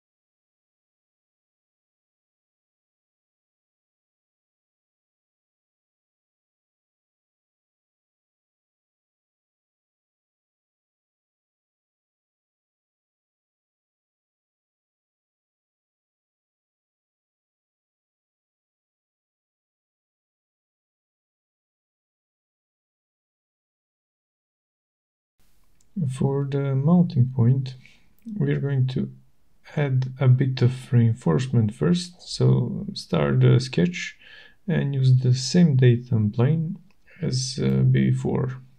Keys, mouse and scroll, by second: 0.6 shift+right click, 0.7 shift+right click, 4.5 middle click, 5.4 shift+right click, 10.7 click, 12.7 shift+right click, 13.8 shift+right click, 14.4 middle click, 15.2 shift+right click, 15.8 middle click, 16.3 shift+right click, 20.1 click, 24.4 click, 25.0 right click, 25.7 click, 27.2 middle click, 27.5 shift+right click, 28.9 shift+right click, 29.1-30.2 scroll, 30.3 shift+right click, 31.1-31.7 scroll, 32.8 middle click, 33.0 middle click, 33.6 shift+right click, 35.8 click, 37.0 click.